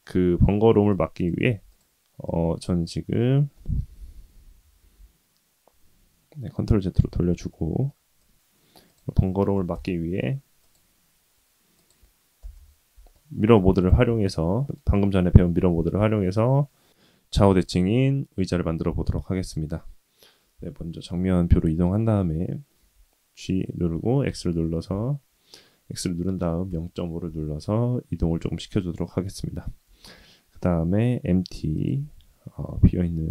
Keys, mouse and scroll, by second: 0.0-0.4 middle drag, 0.4 scroll down 2, 0.9 click, 1.4 x, 2.2 click, 2.9 middle drag, 3.5 middle drag, 4.0 ctrl+z, 4.2 ctrl+z, 4.4 ctrl+z, 4.6 ctrl+z, 4.8 ctrl+z, 7.1 Tab, 7.5-7.8 middle drag, 8.2 drag, 8.6 x, 9.3-9.7 drag, 11.9 click, 12.6 click, 14.4 click, 15.5 click, 18.5-19.5 drag, 20.5 KP_1, 22.8 g, 30.0 shift+a, 32.9 s.